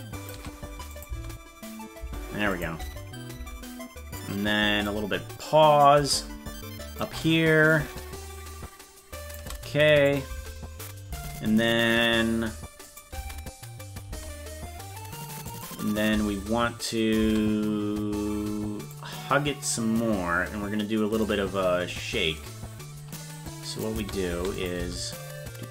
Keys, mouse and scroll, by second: 0.9 click, 2.5 click, 2.7 space, 4.2 click, 5.8-6.9 drag, 8.6 shift+click, 10.0 click, 10.2 space, 12.8 click, 13.1 space, 15.5 click, 16.1 space, 18.9-21.2 drag, 23.4 click, 23.9 space, 24.5 click, 24.7 space.